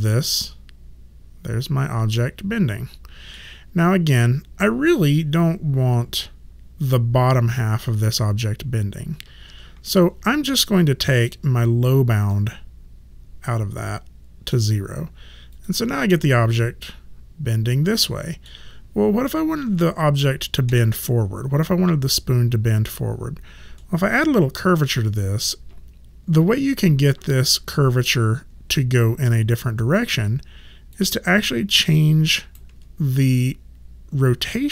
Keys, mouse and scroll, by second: 9.4 ctrl+z, 11.1 click, 12.3 middle click, 15.5 click, 16.2 middle click, 20.7 ctrl+z, 23.8 middle click, 30.2 alt+click, 31.3 alt+middle click, 31.9 alt+right click.